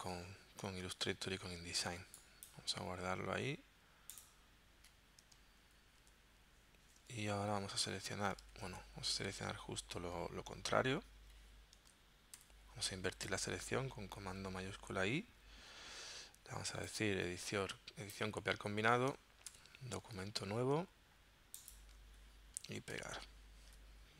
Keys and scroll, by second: 5.6 super+w, 7.4 super+d, 8.5 super+z, 12.4 shift+super+i, 19.6 super+n, 23.0 super+v.